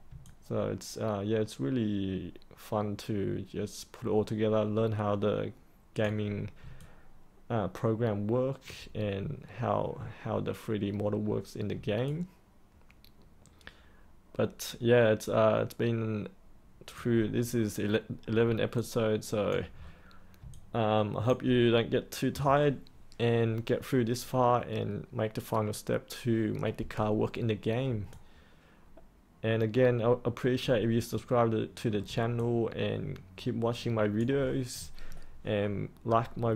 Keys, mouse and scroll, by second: 0.2-6.0 alt+drag, 6.7-8.6 alt+drag, 12.0 alt+click, 17.5-18.4 scroll down 1, 18.7 alt+click, 19.7-20.4 scroll up 1, 20.5 alt+click, 28.1-31.1 alt+drag, 31.1 middle click, 32.3 alt+click.